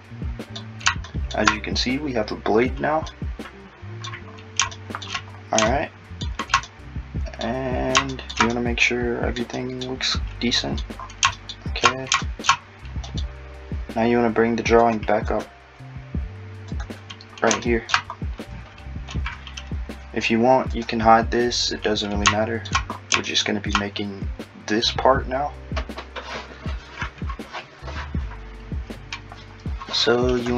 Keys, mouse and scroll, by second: 3.1 middle click, 8.5 middle click, 14.8 click.